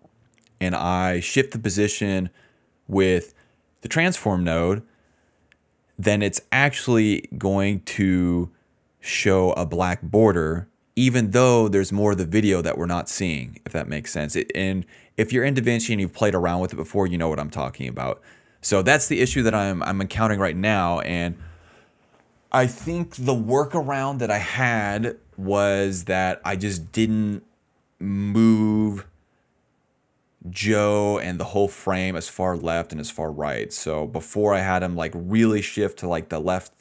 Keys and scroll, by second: 21.9 s, 29.5 ctrl+z.